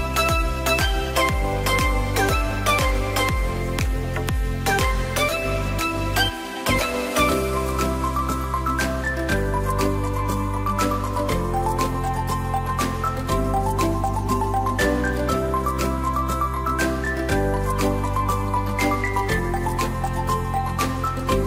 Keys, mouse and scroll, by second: 1.5 click, 1.9-6.5 middle drag, 6.7 click, 7.9 click, 9.0-9.6 scroll up 3, 9.6-10.7 drag, 11.0 click, 11.5 click, 12.8 click, 14.6 shift+d, 16.0 click, 16.7 click, 17.6-19.7 drag, 20.1 click, 20.4-21.2 scroll down 1, 21.2-21.4 shift+middle drag.